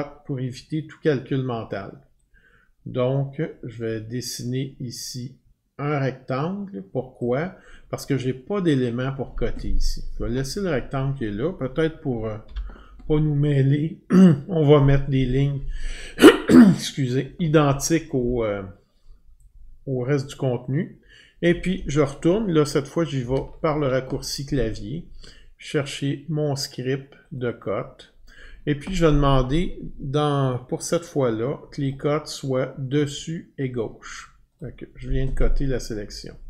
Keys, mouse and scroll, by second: 4.6 click, 7.2-12.3 drag, 14.3-17.6 drag, 22.3 click, 23.2 ctrl+F12, 25.8 click, 26.0 click, 27.4 click, 27.6 click, 31.9 click, 34.6 click.